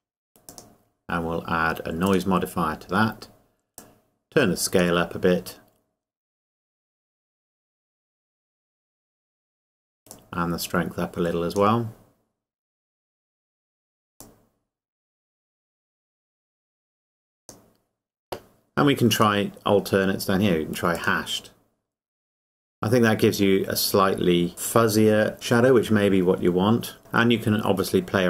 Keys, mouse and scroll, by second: 0.5 click, 10.1 click, 14.2 click, 27.0 click.